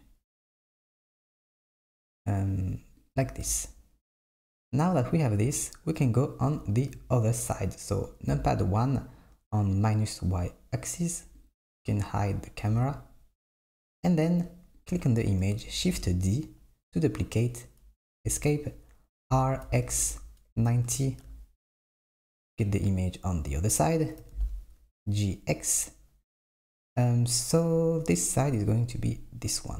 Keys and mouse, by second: 4.7 click, 8.3 KP_1, 11.5 click, 12.0 click, 14.9 click, 15.9 shift+d, 19.3 r, 23.0 click, 24.3 g.